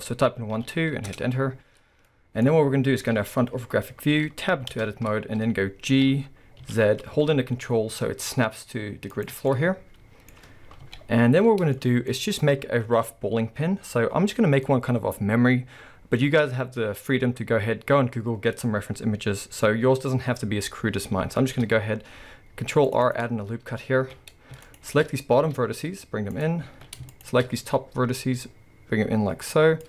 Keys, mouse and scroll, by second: 1.2 Return, 2.1-9.2 middle drag, 3.7-4.7 scroll, 4.7 Tab, 5.1-5.9 scroll up 2, 5.9 g, 9.5-23.1 middle drag, 22.3 ctrl+r, 24.0 alt+a, 24.7 alt+shift+click, 25.4 s, 26.7 alt+a, 27.1 alt+shift+click, 27.6 s.